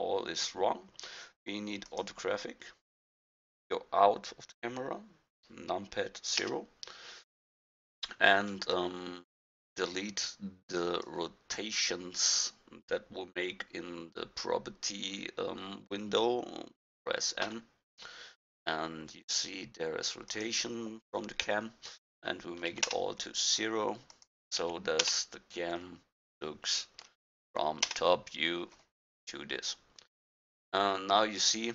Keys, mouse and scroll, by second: 6.4 KP_0, 17.5 n, 20.3-28.6 drag, 30.5-30.9 middle drag.